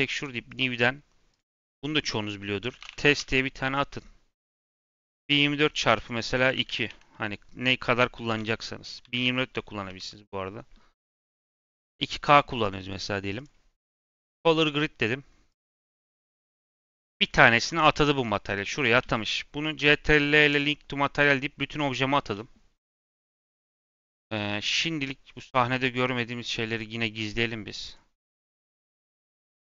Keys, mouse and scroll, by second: 4.5-7.5 drag, 16.6 scroll down 1, 16.8 middle click, 17.1 Tab, 17.4-19.5 middle drag, 19.5 ctrl+l, 20.9-23.9 middle drag, 26.6 click, 27.8 click, 28.6 click, 29.0-29.6 scroll.